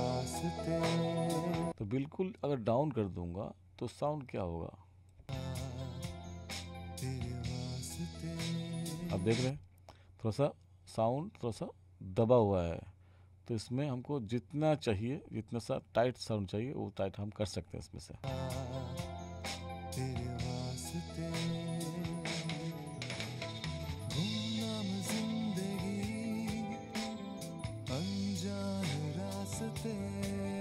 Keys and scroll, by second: 1.7 space, 5.2 space, 9.4 space, 18.1 space.